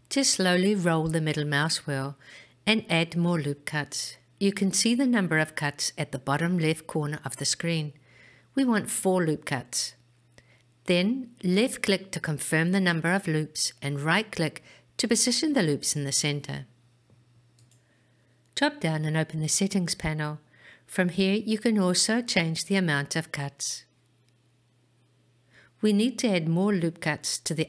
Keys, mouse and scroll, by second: 15.1 click, 15.1 right click, 18.9 click.